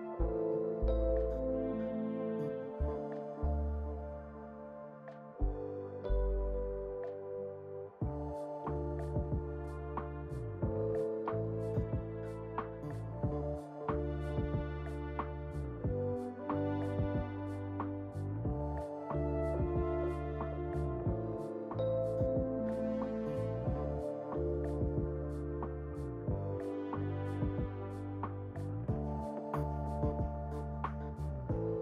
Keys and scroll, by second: 0.9 1, 30.9 alt+w.